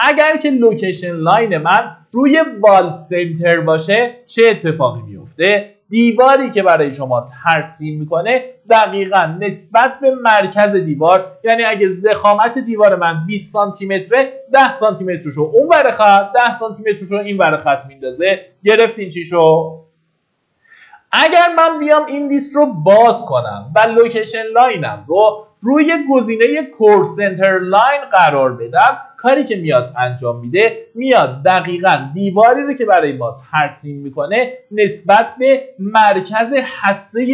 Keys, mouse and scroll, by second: 5.0-6.2 scroll up 1, 6.2 click, 8.8-9.1 scroll up 1, 9.8 Escape, 21.5 click, 34.7 middle click, 35.8-37.3 drag.